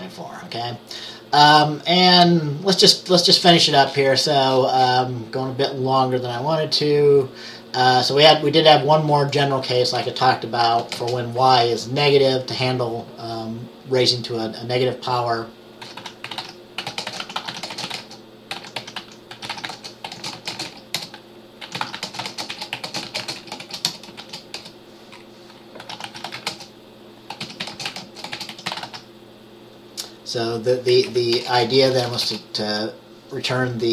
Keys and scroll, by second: 10.0 Return, 10.7-11.0 typing, 15.7-29.4 typing, 30.9-32.3 typing.